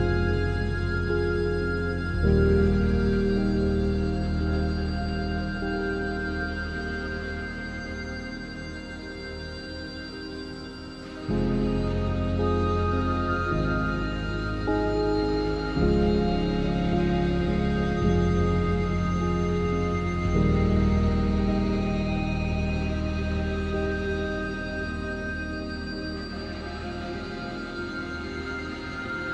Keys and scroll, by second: 16.4 ctrl+0.